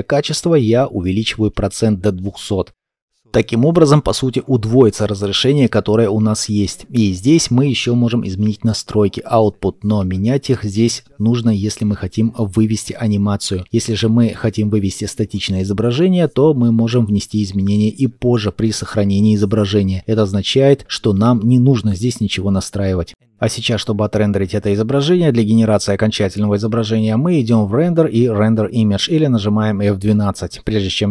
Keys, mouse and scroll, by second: 1.1 KP_0, 1.7 Return.